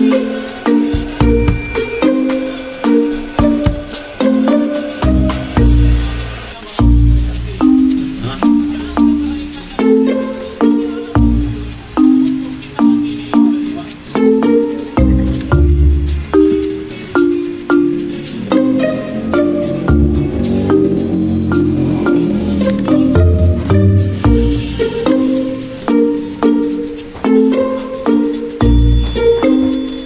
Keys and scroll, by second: 1.2 d, 20.3 v, 27.4-28.3 typing.